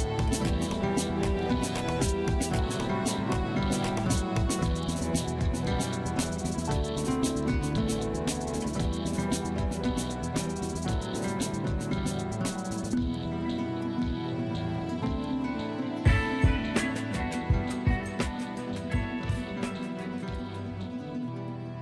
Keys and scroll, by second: 0.2 F3, 2.0 ctrl+g, 3.2 c, 3.7 F2.